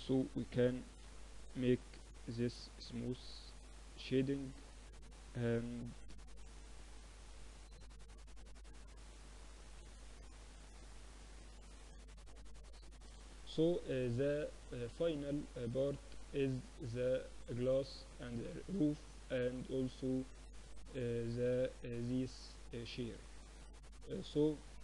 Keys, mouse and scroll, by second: 0.4 ctrl+3, 1.2 Tab, 1.8 ctrl+r, 4.0 ctrl+r, 7.4 ctrl+r, 8.8 Tab, 9.0-10.5 middle drag, 9.9 t, 10.5-12.2 drag, 10.7 t, 12.2 KP_1.